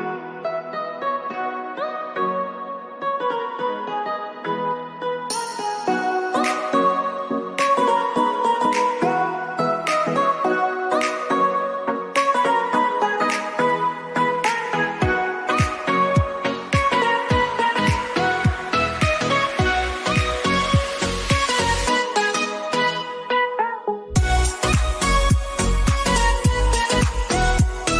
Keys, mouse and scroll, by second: 4.2 click, 6.1 click, 7.5 i, 8.9 click, 10.7 x, 11.9 click, 12.4 x, 12.7 click, 14.9 click, 16.6-19.4 alt+drag, 19.4-21.3 drag, 21.3-23.2 drag, 23.2-23.7 scroll up 2, 23.8-25.9 drag, 26.5 alt+scroll down 1, 27.1 click.